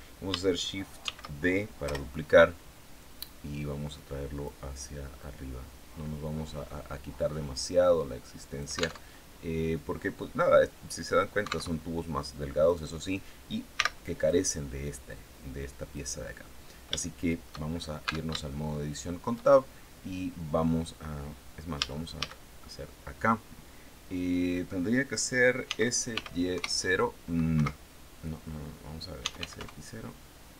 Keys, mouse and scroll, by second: 0.5 shift+d, 1.3 Return, 2.4-4.1 drag, 4.6-8.5 drag, 8.5 alt+Tab, 11.2 alt+Tab, 12.1 right click, 13.2 x, 13.6 click, 15.4 right click, 16.4 shift+click, 17.1-17.5 shift+scroll up 1, 17.5 Tab, 17.9 shift+click, 21.2 a, 25.1 s, 25.6 y, 26.0 KP_0, 27.0 Escape, 28.4-30.5 typing.